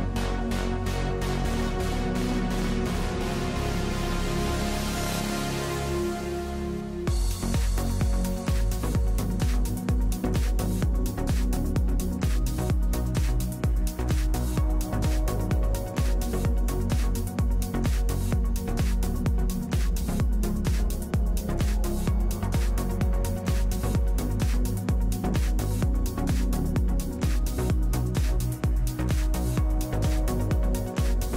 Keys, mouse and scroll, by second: 7.6 middle click, 7.7 click, 7.9-12.2 middle drag, 8.0 click, 12.2-17.5 drag, 17.5 middle click, 17.9 click, 17.9 middle click, 17.9 right click, 19.9 middle click, 23.1 middle click, 23.1 alt+q, 23.3 click, 23.5 middle click, 26.4 middle click, 27.0 click, 27.9 middle click, 28.5-31.3 drag.